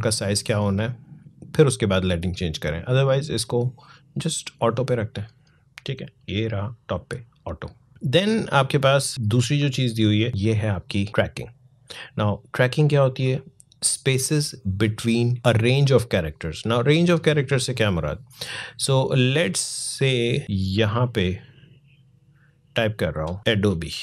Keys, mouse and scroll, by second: 5.8 click, 20.4-23.4 drag, 23.4 BackSpace, 23.7 a.